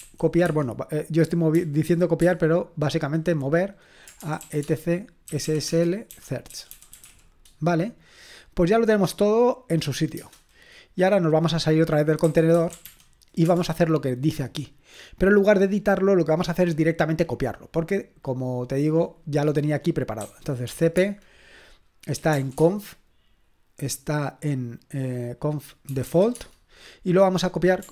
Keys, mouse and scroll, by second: 0.0-2.2 typing, 4.0-7.5 typing, 12.0-13.4 typing, 13.4 Return, 14.7-16.1 scroll down 1, 16.1-17.3 scroll down 1, 17.3-18.2 scroll down 1, 18.2-20.2 drag, 20.2-22.8 typing, 25.7-26.6 typing.